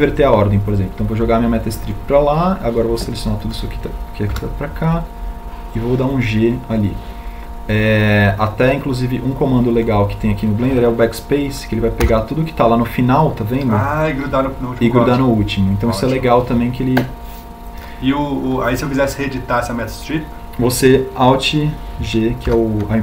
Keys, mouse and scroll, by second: 5.2 g, 12.7 BackSpace, 22.7 alt+g.